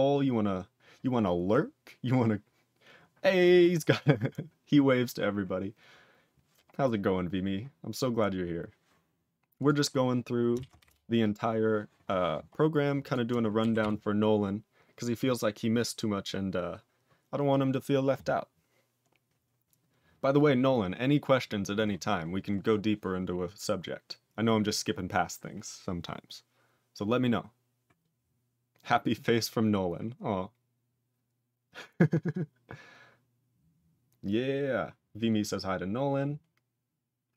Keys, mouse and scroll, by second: 9.5 click, 10.8 Return, 12.5-13.0 scroll up 3, 13.0 click, 13.7 ctrl+s, 17.3 scroll down 2, 19.0 scroll down 2.